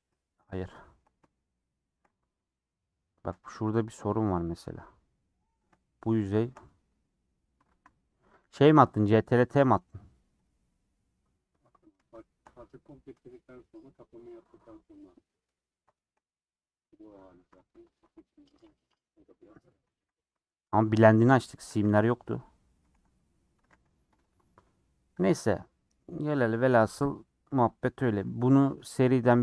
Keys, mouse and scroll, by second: 0.1-2.2 shift+middle drag, 2.2 alt+z, 2.6 middle click, 3.5 2, 4.4 alt+click, 4.8 g, 5.8-7.6 shift+middle drag, 7.6 ctrl+x, 8.0-10.4 middle drag, 10.4 click, 10.7-12.2 middle drag, 12.2 shift+click, 12.6 scroll down 2, 12.8-17.6 middle drag, 17.6 click, 18.9 scroll up 2, 19.8 ctrl+x, 20.5 alt+click, 20.9 alt+click, 21.7 ctrl+x, 22.2 alt+click, 22.7 alt+click, 22.9 ctrl+x, 23.2 scroll down 3, 23.6 a, 24.1 u, 25.2 click, 26.2 scroll down 1, 26.2-29.4 middle drag.